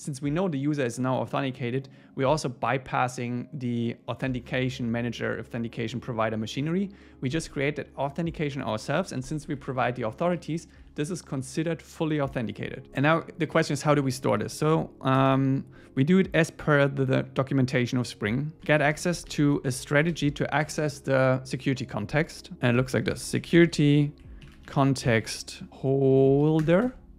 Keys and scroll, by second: 9.4 Left, 10.4 Right, 13.9 Up, 15.2 Return, 25.7 Down, 26.6 Return.